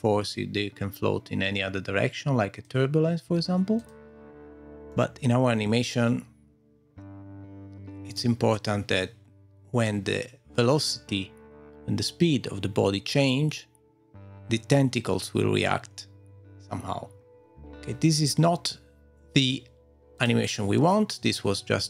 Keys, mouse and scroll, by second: 3.8 click, 4.9 middle click, 9.0 middle click, 14.1 middle click, 17.5 click, 17.8 scroll down 2, 20.1 click, 21.2 click, 21.2-21.8 typing.